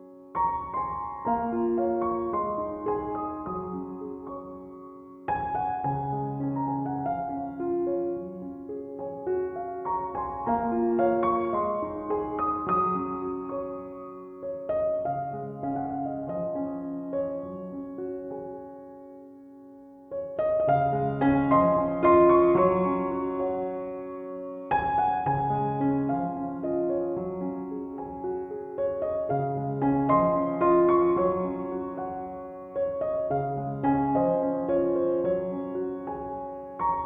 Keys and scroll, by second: 16.0 ctrl+z, 17.2 ctrl+z, 23.8 b.